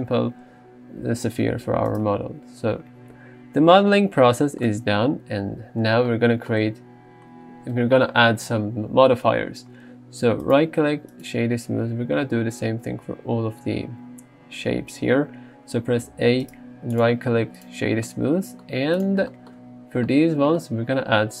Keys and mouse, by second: 2.0-2.7 right drag, 10.5 right click, 16.1 a, 16.7 right click, 17.6 click, 19.0 click.